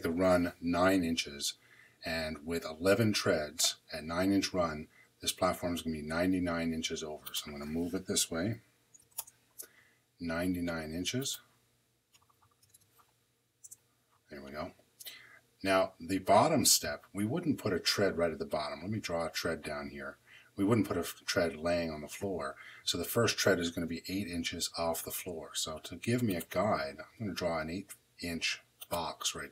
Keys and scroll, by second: 8.9 m, 9.1 Return, 12.5 9, 13.5 Return.